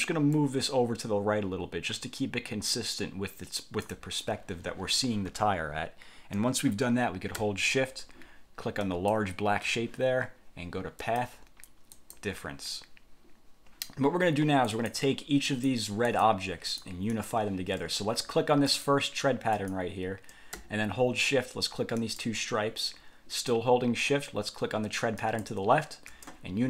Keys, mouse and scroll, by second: 0.4-4.2 ctrl+drag, 9.0 shift+click, 11.2 click, 12.0 click, 14.8 click, 15.6 click, 16.2 click, 16.8 click, 17.2 click, 18.8 click, 19.6 click, 22.1 shift+click, 25.3 shift+click.